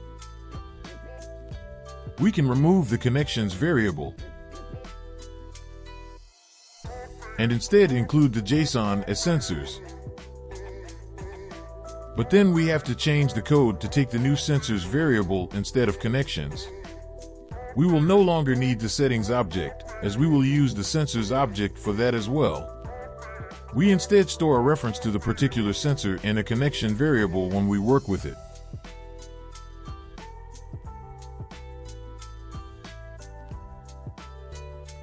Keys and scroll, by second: 4.7 BackSpace, 5.3 BackSpace, 8.7 Return, 9.4 ctrl+v, 17.3 ctrl+v, 20.9 ctrl+v, 25.2 ctrl+v, 27.4 typing, 28.6-30.5 typing.